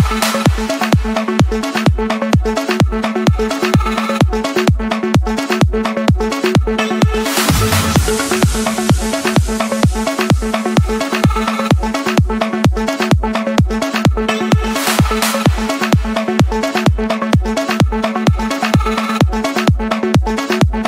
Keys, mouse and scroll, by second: 1.0 click, 1.6 Escape, 2.8 click, 4.6 click, 5.8-6.9 drag, 7.5-8.6 drag, 9.4-11.4 typing, 10.6 Return, 11.6 Escape, 13.4 click, 15.5 click, 16.4-18.0 scroll, 17.3 Escape, 18.6 c, 19.3 Return.